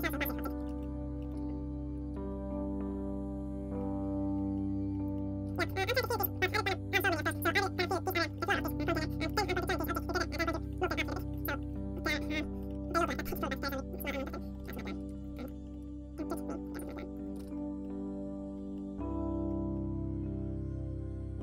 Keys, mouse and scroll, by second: 0.0 right click, 0.9 click, 1.5 alt+a, 1.5-14.2 middle drag, 14.2-21.4 drag, 14.7-21.4 middle drag.